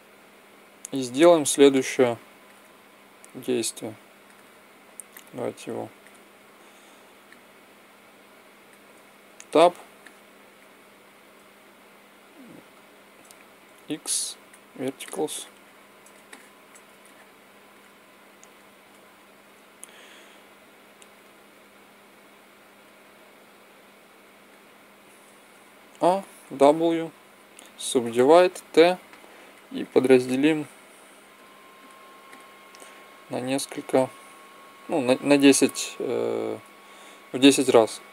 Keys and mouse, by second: 3.0-5.3 drag, 9.0 Tab, 9.8 middle click, 11.9-14.3 right drag, 13.4 x, 20.5-23.0 right drag, 22.6-24.5 drag, 25.2 a, 25.4 a, 26.2 w, 29.2-35.0 drag.